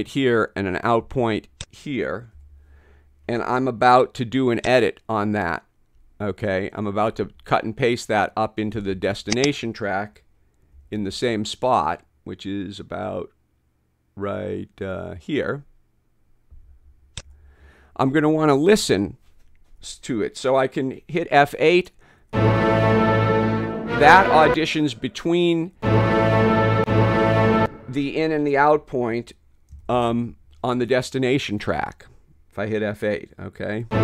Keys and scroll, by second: 2.4 ], 10.8 [, 17.3 ], 22.2 F8, 24.5 space, 25.8 F8, 26.8 F8, 27.6 space, 29.9 {, 33.9 F8.